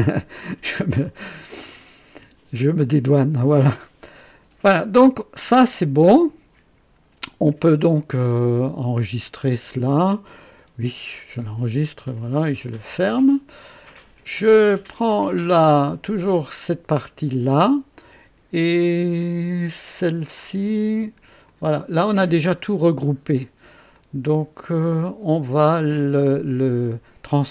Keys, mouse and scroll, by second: 1.0 click, 2.7 click, 8.2-9.6 drag, 11.8 ctrl+s, 11.9 ctrl+s, 12.9 ctrl+click, 14.7 click, 16.0 click, 21.4 click, 23.9 click, 25.5-26.4 drag.